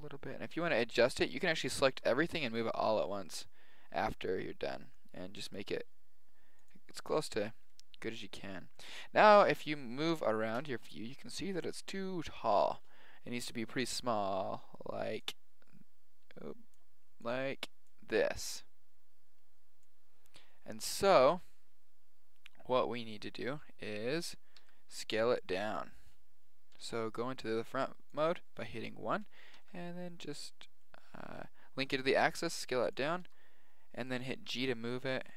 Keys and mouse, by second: 1.9 g, 7.0-10.3 middle drag, 9.4 KP_1, 10.5 middle click, 24.6-26.7 middle drag, 25.7 KP_7, 26.7 KP_1, 28.1 click, 29.5 s, 33.2 g, 34.7-35.3 middle drag.